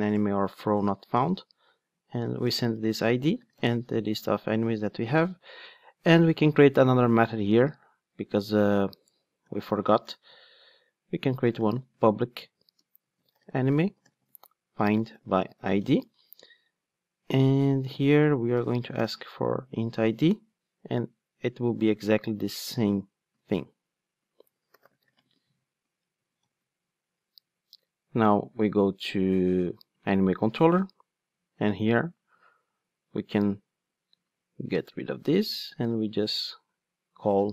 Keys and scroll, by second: 5.3 alt+super+l, 23.3 super+c, 25.2 super+v, 26.4 alt+super+l.